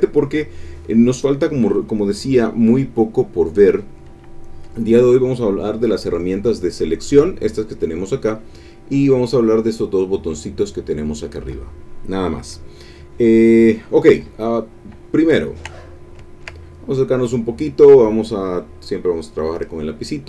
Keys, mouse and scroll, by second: 14.8 click, 15.4 ctrl+click, 15.8 ctrl+click, 16.2 ctrl+click, 18.9 click.